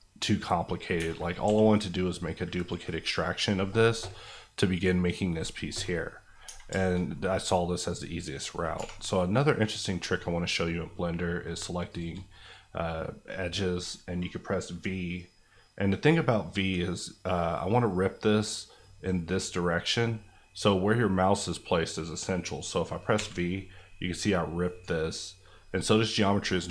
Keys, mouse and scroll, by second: 0.0 scroll up 1, 0.6 middle click, 0.9 Tab, 1.1 scroll down 1, 1.4 g, 2.5 right click, 3.1 middle click, 6.4 Tab, 6.8 shift+middle click, 7.8 click, 8.7 2, 9.0 click, 9.3-11.5 middle drag, 11.9 shift+click, 13.1 middle click, 23.1 v, 24.6 right click.